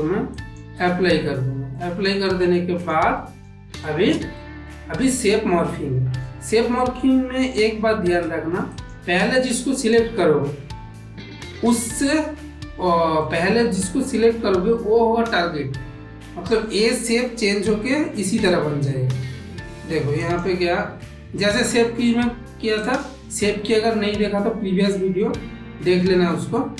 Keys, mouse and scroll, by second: 1.7 ctrl+middle click, 2.2-2.5 middle drag, 2.7 click, 3.1 ctrl+middle click, 3.7 shift+middle click, 4.3 ctrl+middle click, 4.9-6.0 middle drag, 7.1 shift+middle click, 8.6 click, 9.7 shift+click, 13.2 middle click, 20.1 click, 22.8-26.7 drag.